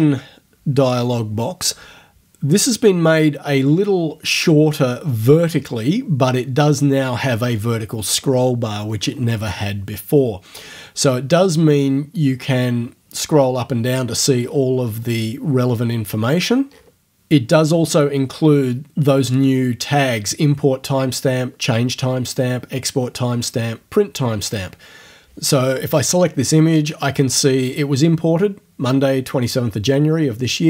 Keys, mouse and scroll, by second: 6.8-7.8 scroll down 4, 7.8-8.7 scroll down 1, 8.8-9.4 scroll up 2, 9.6 scroll up 2, 10.9 scroll down 2, 12.4 scroll down 2, 13.3-14.0 scroll up 4, 14.2-15.2 scroll down 4, 15.2-16.6 scroll up 2, 16.6-18.7 scroll up 1.